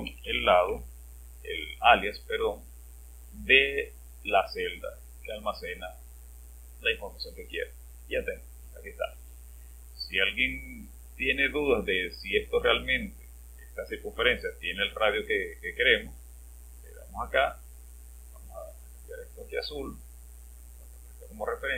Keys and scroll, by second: 0.0-1.1 typing.